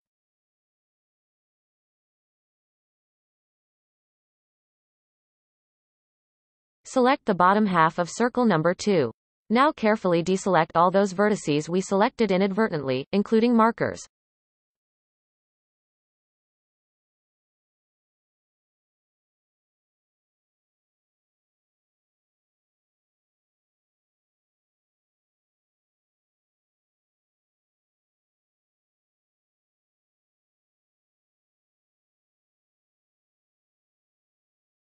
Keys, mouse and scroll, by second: 0.1-1.2 scroll down 2, 1.2 f, 1.8-3.5 shift+middle drag, 3.5 click, 4.7-5.8 shift+drag, 5.8 f, 6.5-8.7 shift+middle drag, 8.7 b, 12.3 shift+middle click, 12.9-14.1 scroll up 3, 14.1-14.5 shift+middle drag, 14.5-15.5 scroll up 1, 15.5 shift+click, 15.9-16.6 scroll up 4, 16.6-17.0 scroll down 2, 17.0-18.0 shift+middle drag, 18.0 b, 20.1-20.5 shift+middle drag, 20.5 scroll up 3, 21.3-21.8 shift+middle drag, 21.8-22.2 scroll up 1, 22.8 shift+drag, 23.1 shift+click, 23.6 shift+click, 24.0 shift+click, 24.3 shift+click, 24.7 shift+click, 25.0 shift+click, 25.3 shift+click, 25.6-26.9 scroll down 15, 26.9-27.6 shift+middle drag, 27.6 shift+click, 28.2-31.2 shift+middle drag, 31.2-31.9 scroll down 4, 32.2-33.4 scroll up 4, 33.4-34.8 shift+middle drag, 34.8-34.9 scroll up 2.